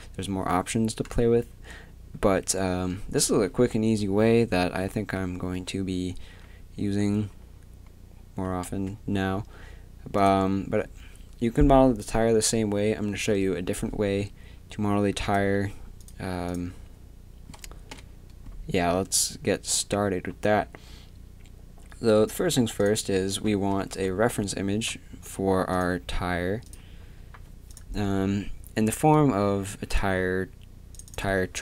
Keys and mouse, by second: 8.7 Tab, 10.2-12.1 drag, 15.2-21.1 drag, 17.9 n, 22.8-23.9 drag, 23.9 KP_7, 26.7 KP_7.